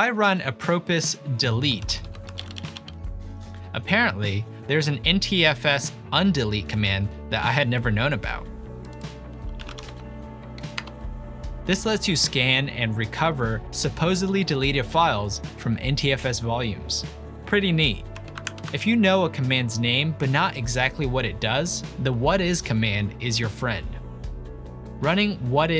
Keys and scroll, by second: 0.9-3.5 typing, 9.3-10.3 typing, 10.8 Return, 12.8 typing, 14.7 typing, 18.2 typing, 18.5 ctrl+l.